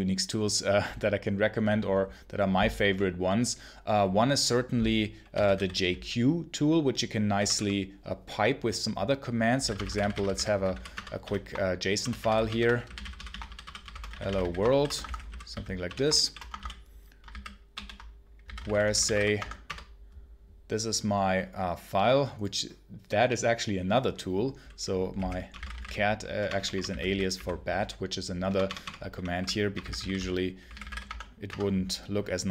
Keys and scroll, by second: 4.9-5.9 typing, 7.2 BackSpace, 9.2-16.9 typing, 12.1 Return, 17.2 ctrl+s, 17.6 ctrl+q, 18.1-19.5 typing, 19.5 Return, 24.8-31.2 typing, 31.3 Return.